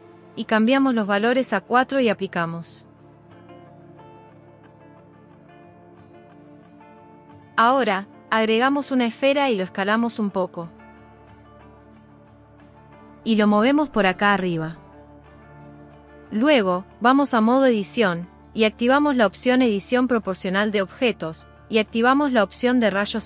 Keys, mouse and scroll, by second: 1.6 click, 2.0 click, 3.6 click, 4.0 click, 7.1 shift+a, 11.7 s, 13.2 click, 13.6 g, 15.3 click, 16.7 Tab, 20.3 click, 22.5 click.